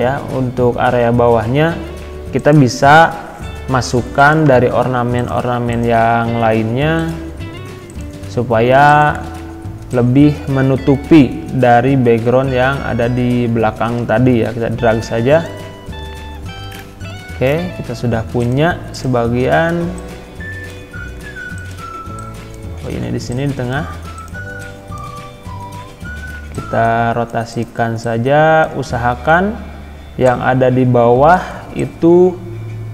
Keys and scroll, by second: 20.9 ctrl+z, 22.8 ctrl+z.